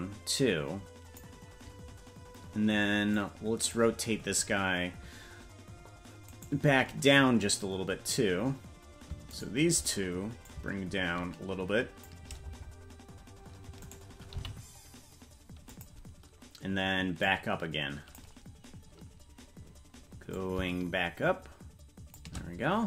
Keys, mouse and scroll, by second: 3.1 click, 6.5 right click, 9.5 shift+right click, 10.4-12.1 drag, 13.8 right click, 14.3 g, 17.2-18.2 drag, 20.3-22.2 drag.